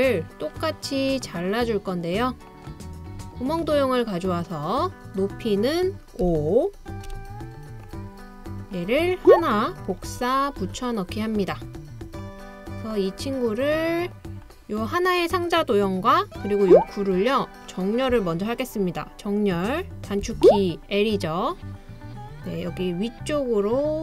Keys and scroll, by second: 6.3 5, 7.1 Return, 8.9 typing, 10.1 super+c, 10.6 super+v, 20.2 i.